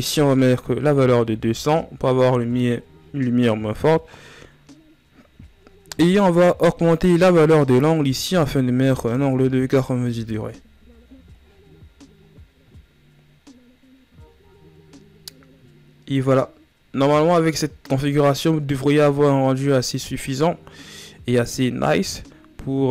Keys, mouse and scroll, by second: 1.2 KP_0, 6.7-9.2 drag, 9.2 BackSpace, 16.7 ctrl+s, 22.8-22.9 drag.